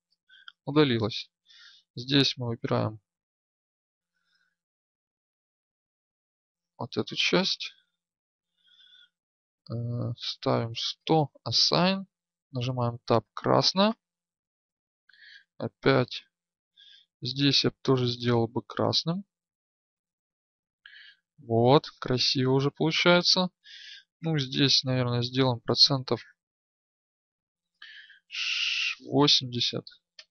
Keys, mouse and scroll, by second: 1.4 Tab, 2.7 a, 6.0 b, 12.2 Tab, 12.2-14.9 drag, 14.9 Tab, 18.0 right click, 20.3 Tab, 20.5-22.4 drag, 22.4 Tab, 24.1-26.0 alt+drag, 26.9-30.3 drag.